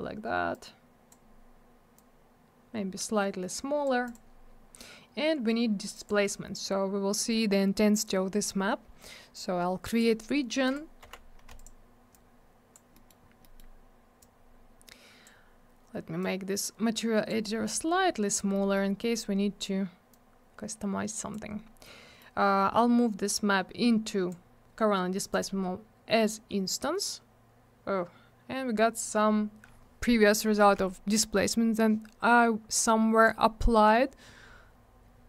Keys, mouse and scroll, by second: 0.5 click, 1.9 click, 4.0 click, 4.1 click, 5.9 click, 6.0 click, 9.3 click, 10.6 click, 10.7 click, 11.5 click, 11.6 click, 12.1 click, 12.9 middle click, 13.1 middle click, 13.2 scroll down 1, 13.4 middle click, 13.5 double middle click, 14.2 click, 16.2 click, 17.7 click, 18.5 middle click, 18.9-19.2 scroll down 1, 20.1 click, 21.8 middle click, 23.3 click, 24.3 click, 25.3 click, 25.4 click, 32.7 click.